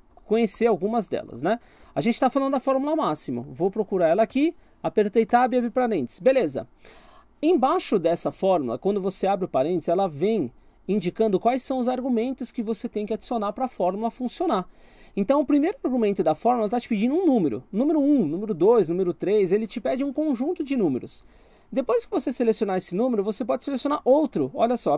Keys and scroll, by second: 0.1 BackSpace, 1.8 m, 3.4 Down, 23.9 ;.